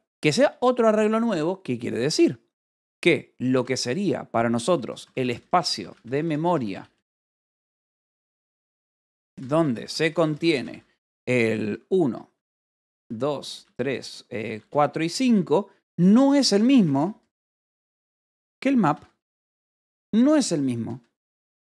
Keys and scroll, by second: 2.0-14.6 typing, 2.4 Escape, 15.1 Escape, 15.8-19.3 typing, 20.8 j.